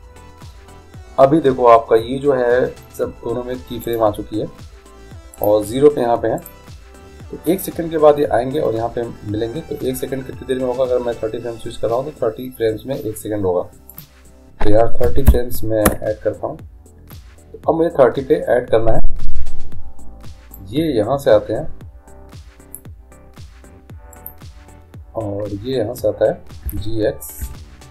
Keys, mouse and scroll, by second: 4.1-8.4 right drag, 14.1-16.0 drag, 20.7-22.7 drag, 24.3-26.3 right drag, 26.8 g.